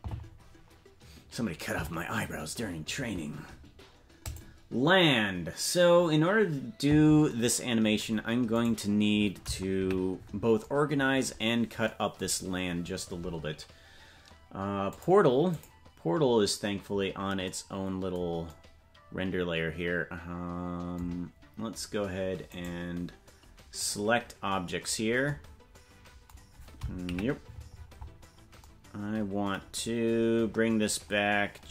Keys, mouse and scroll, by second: 6.4-8.6 drag, 8.6 right click, 9.7 KP_Decimal, 11.4-11.8 scroll down 3, 12.3-12.9 scroll up 3, 14.9 click, 22.5-23.9 right drag, 24.9-25.2 scroll down 1, 27.0 KP_Decimal, 27.7-28.6 scroll up 8, 28.6-29.0 scroll up 4, 29.7-31.7 scroll down 7.